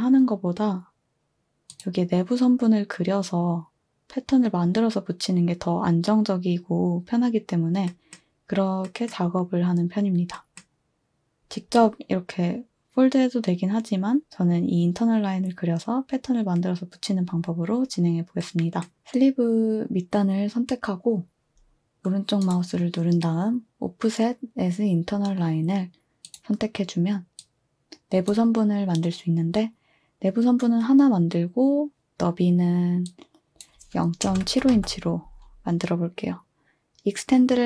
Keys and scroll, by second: 34.0-35.3 typing.